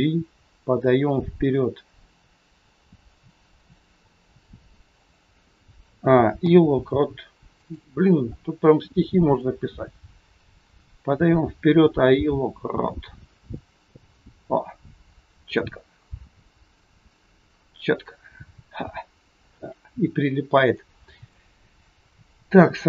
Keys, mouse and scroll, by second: 5.8 a, 6.3 i, 9.3 click.